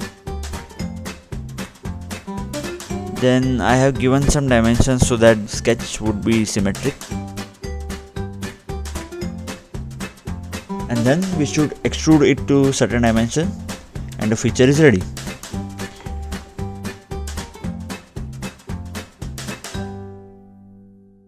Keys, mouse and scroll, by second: 0.7-1.1 scroll up 2, 2.8 click, 3.9 scroll down 2, 5.6-6.7 scroll up 1, 6.9 click, 8.4 click, 8.9 middle click, 10.4-10.7 scroll up 1, 10.7 scroll down 2, 14.2-14.5 scroll up 2, 19.7 click.